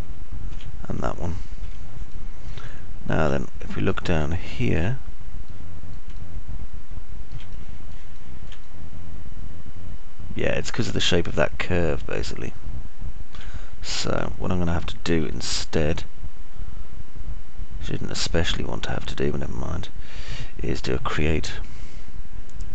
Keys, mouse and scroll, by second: 3.3 Delete, 4.3 alt+middle click, 5.4 middle click, 5.4 scroll up 1, 5.9 alt+click, 5.9 alt+middle click, 5.9 alt+right click, 6.9 click, 6.9 middle click, 6.9 right click, 7.8-8.8 alt+middle drag, 8.1 alt+click, 8.1 alt+right click, 8.9 click, 8.9 middle click, 8.9 right click, 10.4-14.8 alt+middle drag, 15.4 middle click, 15.8 alt+middle click, 20.8-21.8 alt+middle drag.